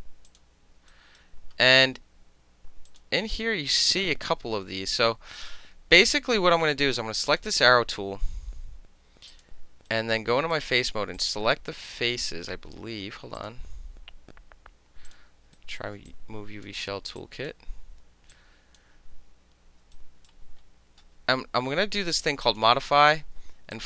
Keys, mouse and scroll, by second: 0.3 click, 0.9 alt+right click, 2.9 click, 5.4 right click, 7.3 click, 9.3 click, 9.9-10.5 right drag, 11.2 click, 13.4 click, 15.1 click, 15.6 alt+middle click, 15.6 alt+right click, 16.1-16.7 drag, 17.2-17.5 drag, 18.3-18.8 drag, 20.0-22.5 alt+middle drag, 20.0 alt+right click, 22.5 click, 22.6-23.6 middle drag, 23.8 click.